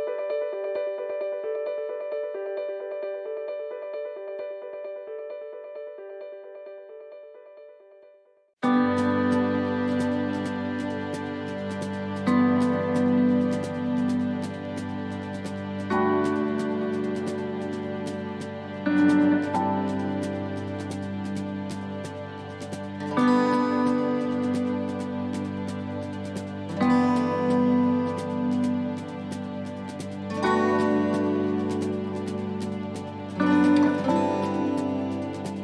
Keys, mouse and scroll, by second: 0.5 s, 4.2 click, 5.4 middle click, 6.2 middle click, 8.8 scroll up 3, 9.2 middle click, 10.0 middle click, 11.0 shift+middle click, 11.3-11.7 scroll down 1, 11.8 shift+middle click, 12.1 shift+middle click, 13.7 click, 16.0 click, 19.3 click, 22.1 click, 26.8 middle click, 27.2 scroll down 2, 27.6 middle click, 29.2 shift+middle click, 29.8 middle click, 31.5 click.